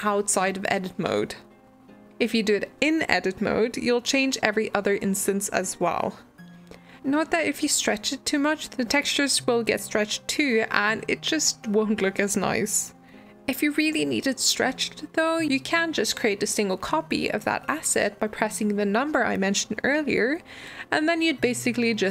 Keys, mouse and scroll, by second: 0.0 shift+middle click, 0.2 g, 0.7 middle drag, 0.8 scroll down 2, 1.0-1.3 middle drag, 1.3 click, 1.4 shift+click, 1.6 shift+click, 1.7 shift+click, 1.8 shift+click, 2.0 shift+drag, 2.1 middle click, 2.3 scroll up 1, 2.3 middle click, 2.4 s, 3.3 middle click, 3.5 g, 4.0 click, 4.4 shift+click, 4.5 s, 5.2 g, 5.8 click, 5.9 middle click, 6.0 scroll down 1, 6.2 click, 6.3-6.9 shift+middle drag, 6.9 g, 7.6-8.5 middle drag, 8.5 g, 9.2 g, 9.7 middle drag, 10.0 g, 10.4-11.5 shift+middle drag, 11.6 alt+d, 12.2 middle click, 12.5 g, 13.3 middle click, 13.5 s, 15.6-17.8 middle drag, 17.8 click, 18.4 click, 20.0-22.1 drag.